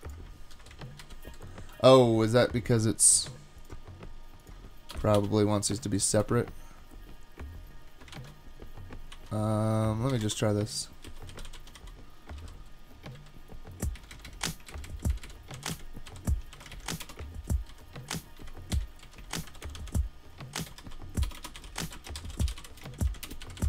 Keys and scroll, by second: 1.0 shift+super+Right, 4.9 BackSpace, 5.2 BackSpace, 8.1 shift+super+Right, 9.1 super+x, 10.2 Escape, 10.8-12.4 typing, 13.1 Down, 14.0 Right, 14.7 alt+Right, 14.9 alt+Right, 16.7 shift+super+Right, 17.0 BackSpace, 17.7 super+v, 18.7 Up, 19.1 Down, 19.5 alt+shift+Left, 19.6 alt+shift+Left, 20.4-23.1 typing, 23.3 Return, 23.4 Down, 23.6 Down.